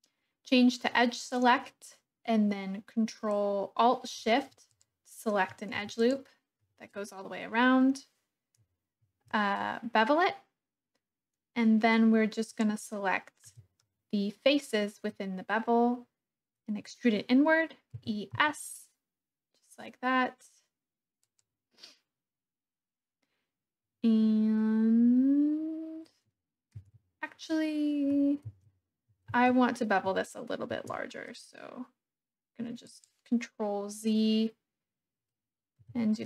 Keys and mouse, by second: 5.9 alt+shift+click, 9.0 ctrl+b, 12.5 click, 13.5 3, 18.0 e, 18.3 s, 21.2 click, 26.7 ctrl+z, 28.4 ctrl+z, 29.4 ctrl+z, 30.7 ctrl+b, 32.8 click, 35.8 3.